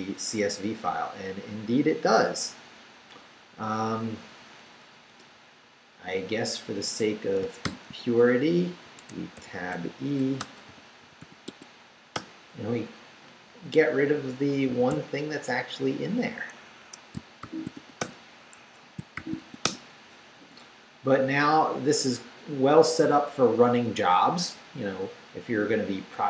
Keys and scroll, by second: 5.1 Return, 7.6-11.7 typing, 12.1 Return, 14.7 d, 16.7 Escape, 17.4 shift+;, 17.7 shift+w, 18.0 Return, 18.5 Escape, 18.9-19.9 typing.